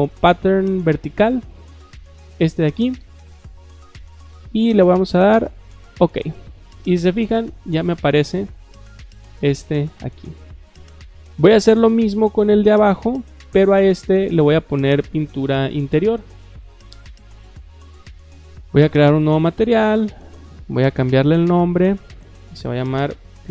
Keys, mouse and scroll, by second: 0.6-1.4 scroll down 2, 1.4-1.7 scroll down 1, 2.8 click, 3.5 click, 5.8 click, 13.2 click, 14.1 click, 16.0 click, 16.4 click, 18.7 click, 19.3 click, 20.6 click, 21.5 click, 22.7-23.5 typing.